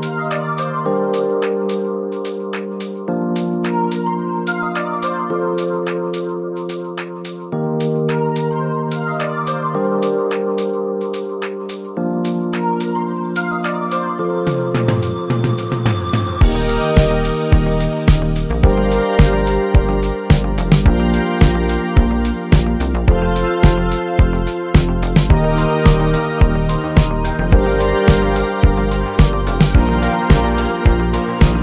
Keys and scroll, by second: 0.5-2.7 typing, 9.6 Delete.